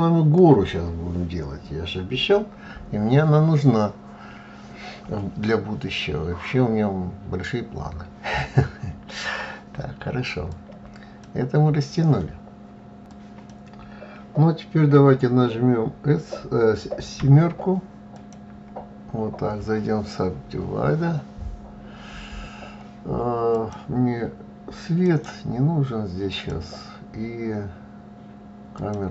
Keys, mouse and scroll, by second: 16.9 KP_7, 17.9 click, 18.2 KP_7, 23.3 click, 24.8-27.9 right drag, 28.5 click, 28.9-29.1 right drag.